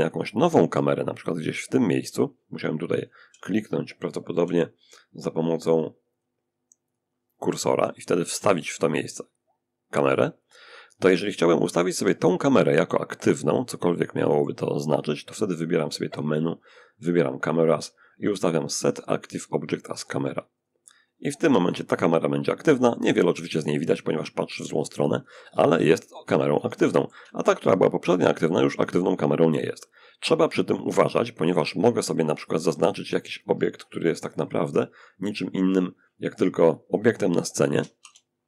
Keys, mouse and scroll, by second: 0.7 click, 2.6 w, 3.7 w, 5.0-6.0 drag, 6.2 click, 7.0 click, 7.6 shift+a, 9.4 click, 10.8-12.4 middle drag, 12.8-14.2 middle drag, 14.2-14.8 scroll up 1, 15.3 click, 19.8 click, 22.2-23.1 scroll up 1, 23.1 middle click, 24.0-24.6 scroll up 1, 24.6-25.8 scroll up 1, 25.8 shift+scroll up 1, 26.0-27.9 shift+middle drag, 29.8-30.5 scroll up 1, 31.4 click, 33.2 click, 33.9-36.2 drag, 36.4 click, 37.2 shift+c, 37.7-38.4 shift+middle drag.